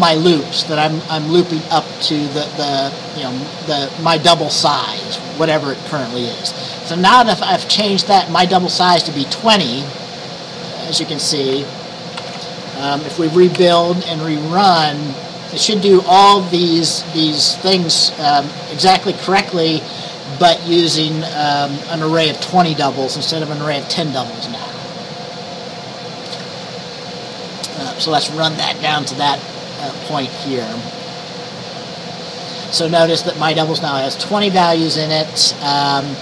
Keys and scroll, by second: 12.3 ctrl+s, 13.6 ctrl+b.